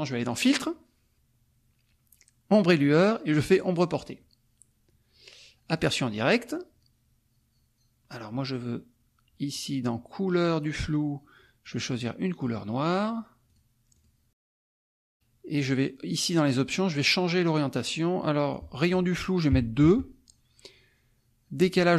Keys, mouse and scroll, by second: 0.2 click, 3.5 click, 5.7 click, 10.5 click, 11.6 click, 13.5 click, 14.0 click, 15.6 click, 18.6 click, 19.8 Tab.